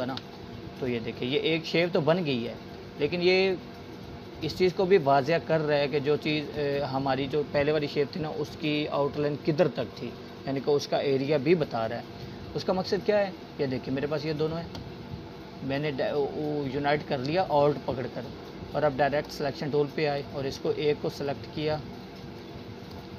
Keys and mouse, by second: 13.7-15.6 drag, 20.1-23.0 drag.